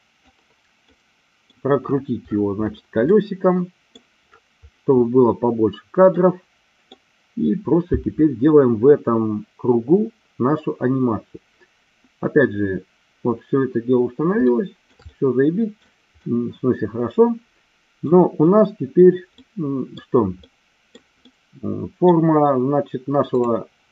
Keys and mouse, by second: 1.0 middle click, 3.1 middle click, 6.1 middle click, 14.5 shift+middle click, 15.1 middle click, 16.2-18.1 middle drag, 19.4 middle click, 20.5 middle click, 21.2 middle click, 23.3 click.